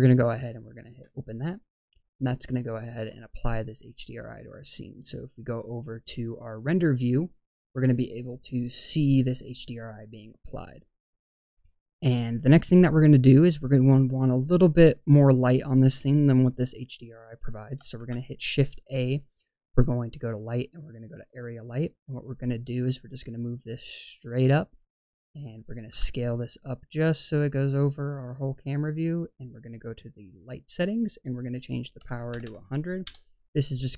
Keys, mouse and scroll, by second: 3.1 click, 10.8-14.0 scroll down 2, 17.9 shift+a, 22.7 click, 28.3-28.9 drag, 28.3 s, 29.6 click, 31.5 click, 32.3 KP_0.